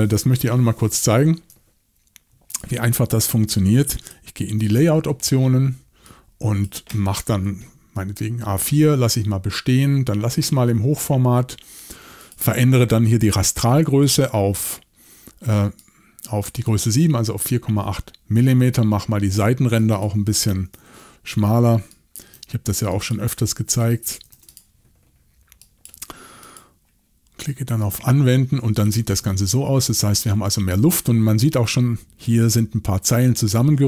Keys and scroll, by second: 4.4 shift+super+l, 20.4-24.8 typing.